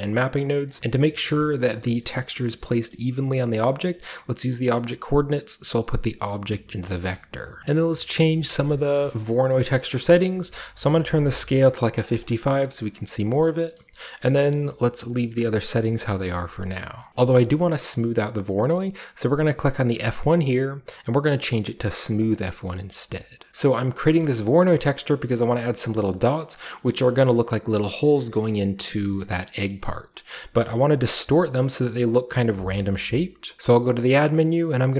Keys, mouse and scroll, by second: 0.2-1.4 drag, 1.6 shift+middle drag, 2.0-2.7 shift+middle drag, 2.9-6.3 middle drag, 3.4-7.6 drag, 3.6-5.0 scroll up 1, 5.0-6.3 scroll up 1, 6.8-7.6 scroll down 1, 7.0-7.4 middle drag, 7.4 typing, 7.6-10.0 scroll up 1, 7.8 middle click, 8.3 middle click, 8.8 middle click, 9.3 middle click, 10.1 middle click, 10.1-10.9 scroll up 1, 10.9-13.6 drag, 10.9-11.6 scroll up 1, 11.6 scroll up 1, 11.6 typing, 13.7-15.7 middle drag, 16.1-16.4 scroll up 2, 16.1 middle click, 16.4 scroll down 2, 17.3-19.9 shift+middle drag, 17.3-19.9 shift+scroll up 1, 19.9 click, 22.2 click, 22.7 drag, 23.5-24.1 scroll up 1, 24.1 middle click, 24.4 middle drag, 24.7 shift+middle drag, 24.8-25.9 scroll up 1, 25.9 scroll up 1, 25.9 scroll down 1, 26.1 middle drag, 26.3 shift+middle drag, 26.7 middle drag, 26.7 scroll up 1, 28.6 middle drag, 28.6-30.6 scroll down 3, 28.9-29.5 middle drag, 29.7-30.2 middle drag, 30.3 middle click, 30.6-32.9 middle drag, 30.6-31.7 scroll up 2, 31.7-32.9 scroll up 1, 33.1-34.9 middle drag.